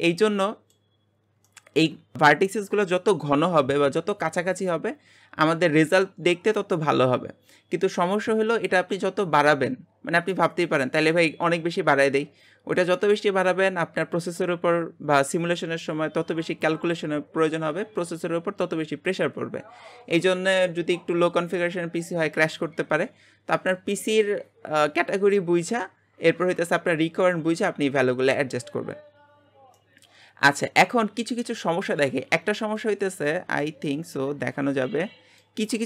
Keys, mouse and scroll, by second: 0.1-1.1 middle drag, 1.1-1.5 scroll up 1, 1.5-32.7 shift+middle drag, 33.3-35.6 middle drag, 35.6 scroll up 1.